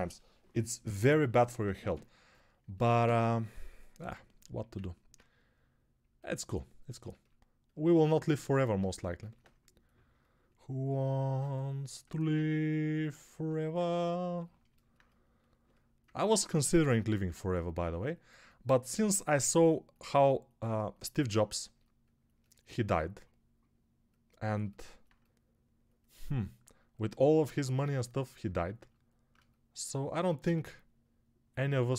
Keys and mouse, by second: 4.5 alt+q.